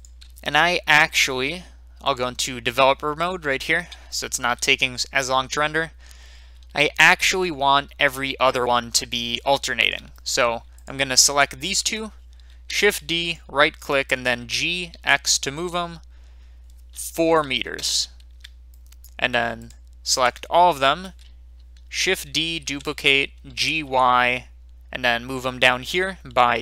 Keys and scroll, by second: 12.8 d, 14.4 g, 15.2 x, 17.3 4, 17.7 Return, 22.4 shift+d, 23.5 g, 23.8 y.